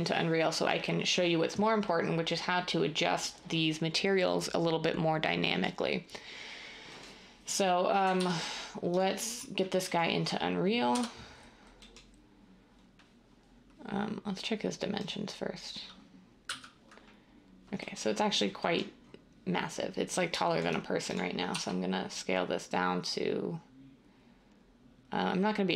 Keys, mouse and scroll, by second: 8.1 ctrl+s, 10.9 ., 16.4 n, 21.6 s.